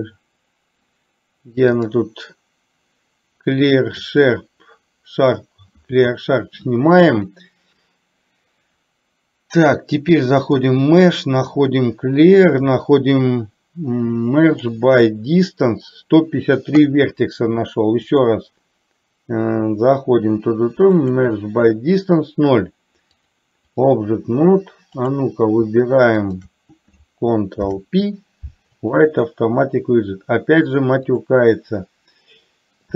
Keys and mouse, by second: 1.8-4.4 drag, 10.6-14.9 drag, 18.1-21.3 drag, 23.3-24.1 drag, 24.9 click, 26.4 shift+click, 27.7 ctrl+p, 31.3 click.